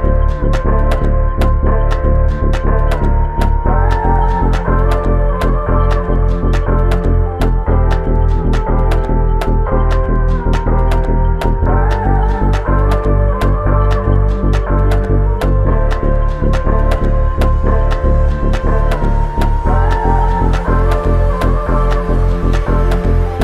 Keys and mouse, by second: 0.5 ctrl+click, 2.1 ctrl+shift+click, 3.4 shift+click, 4.5 alt+shift+click, 6.9 shift+click, 8.4 alt+click, 11.5 double click, 13.4 alt+click, 16.6 alt+click, 18.7 double click, 21.3 alt+click.